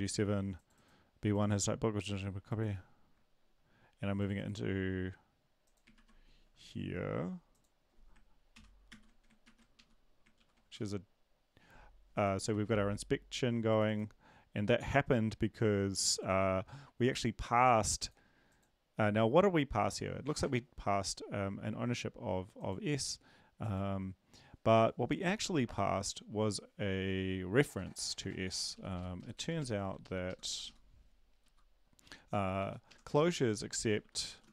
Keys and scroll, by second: 5.9 ctrl+`, 8.5 ctrl+/, 8.9 ctrl+s, 9.4 ctrl+`, 9.7 Up, 10.3 ctrl+l, 10.7 Return, 12.5 ctrl+`, 29.2 Up, 29.2 Left, 29.3 Down, 29.6 Down, 30.0 ctrl+Left, 30.6 Left, 32.9 End, 32.9 Up, 33.1 ctrl+Left, 33.3 ctrl+Left, 33.7-34.5 typing.